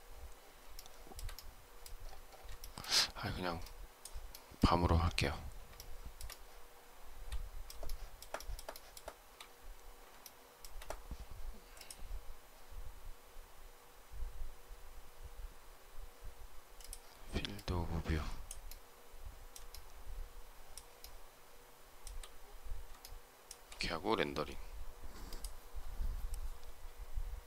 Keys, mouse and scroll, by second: 0.6 shift+middle click, 2.5 shift+middle click, 5.7 shift+middle click, 7.7 shift+middle click, 8.3 shift+middle click, 8.6 shift+middle click, 10.1 shift+middle click, 19.6 shift+middle click, 20.9 shift+middle click, 22.9 shift+middle click.